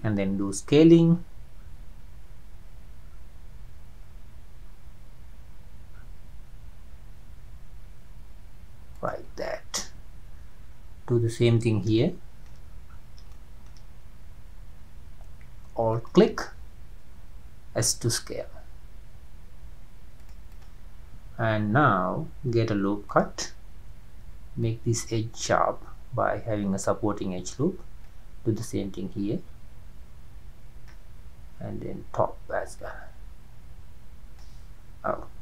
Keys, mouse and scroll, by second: 0.4 s, 9.3 scroll down 3, 12.0-12.6 shift+middle drag, 12.6-13.0 scroll up 5, 13.4-13.7 shift+middle drag, 13.7-14.2 shift+scroll up 1, 15.9 alt+click, 16.4-16.8 scroll down 2, 17.8 s, 20.5 click, 23.1-27.7 drag, 28.4-31.5 drag, 33.3-35.4 drag.